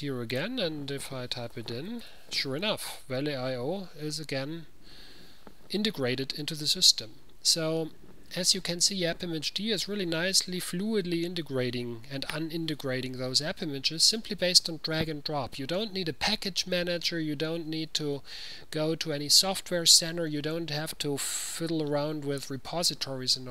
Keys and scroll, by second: 1.4-2.7 typing.